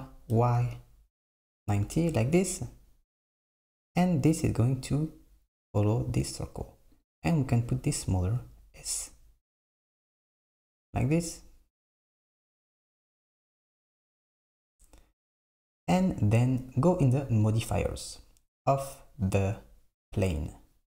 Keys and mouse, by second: 7.0 click, 8.4 s, 17.5 click.